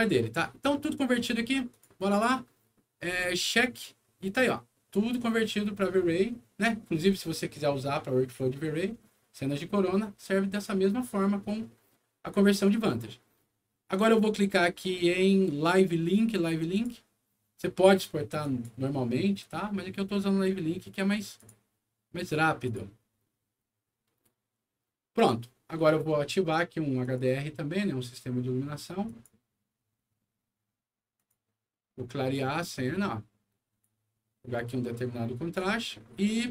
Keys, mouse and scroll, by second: 1.7 click, 3.1 click, 16.7 click, 18.4 click, 21.3 click, 22.6 click, 25.8 click, 27.0 click, 29.0 click, 31.1 click, 32.3-33.8 drag, 34.5 click, 35.8-36.5 right drag, 36.3 a.